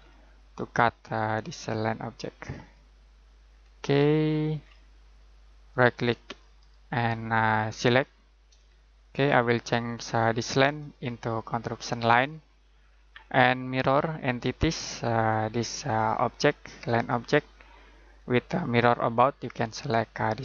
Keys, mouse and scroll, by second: 3.5-5.1 scroll up 1, 5.7 ctrl+right click, 6.5 right click, 7.8 click, 8.7 middle click, 9.9 click.